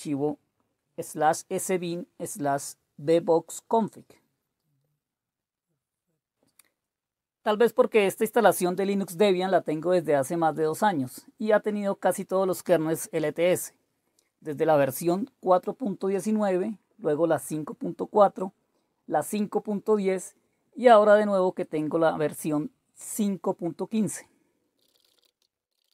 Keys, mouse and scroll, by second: 10.0-11.5 typing, 14.8 super+f, 16.3 super+f, 18.9 click, 19.2 middle click, 19.8 click, 20.3 click, 21.1 click, 21.2 middle click, 22.9 click, 23.6-25.9 typing.